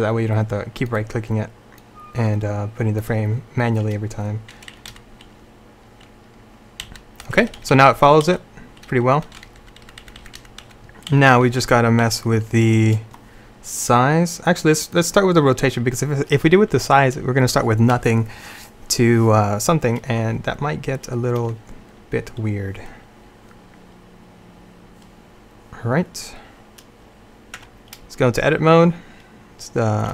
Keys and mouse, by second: 5.0 Right, 6.9 Right, 7.3-7.7 Left, 7.8 Left, 8.0 Left, 8.3 Left, 9.2 Left, 9.5 Right, 9.7 Right, 9.9 Right, 10.1 Right, 10.4 Right, 10.5 Right, 10.7 Right, 11.2 Left, 11.4 Left, 11.6 Left, 11.7 Left, 11.9 Left, 12.1 Left, 27.7 Tab.